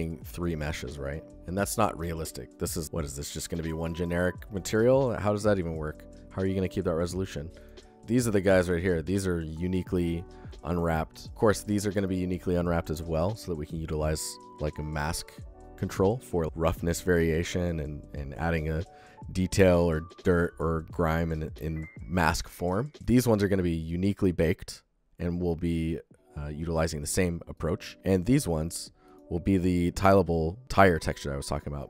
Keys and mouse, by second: 0.2 click, 2.8 g, 7.0 click, 11.9 click, 27.4 click, 28.9 click, 30.6 alt+shift+click, 31.4 alt+shift+drag.